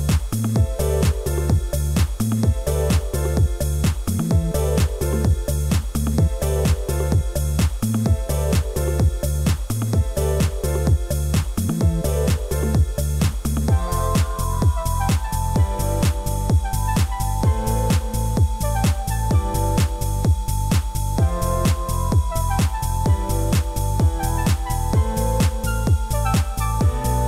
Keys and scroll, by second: 1.9 ctrl+a, 6.5 ctrl+t.